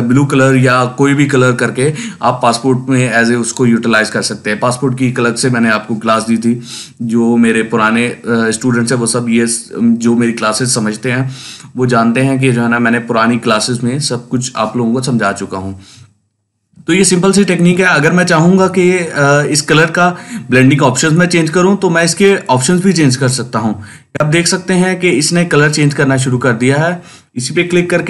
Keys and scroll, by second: 16.6 ctrl+space, 17.2 ctrl+space, 27.6 Down.